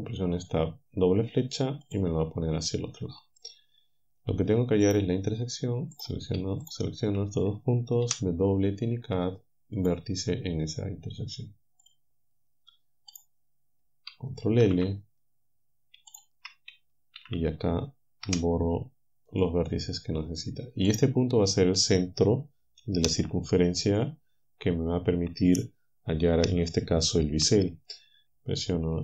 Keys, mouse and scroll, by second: 1.9 click, 4.9 click, 8.1 w, 9.8 click, 11.9 click, 13.2 click, 14.7 ctrl+l, 16.1 shift+right click, 17.2 ctrl+l, 18.3 Delete, 19.3 click, 20.9-22.0 drag.